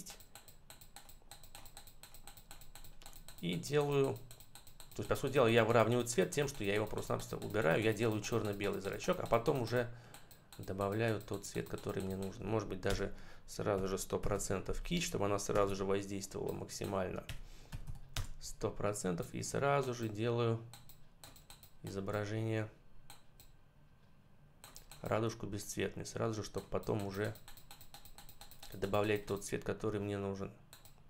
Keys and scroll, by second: 12.7 Return, 13.6 1, 14.1 0, 15.4 BackSpace, 17.1 1, 17.6 0, 18.0 Return.